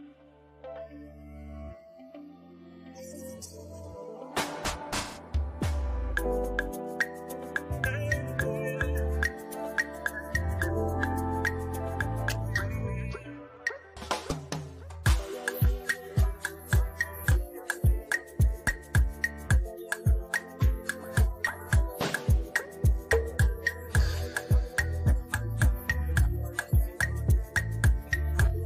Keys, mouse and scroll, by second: 0.8-1.3 typing, 2.4-3.2 typing, 4.2-5.0 typing, 6.5 click, 8.3 typing, 9.9 click, 10.1-14.8 drag, 17.4-23.2 drag, 25.7 Up, 25.9 Right, 26.8 Up.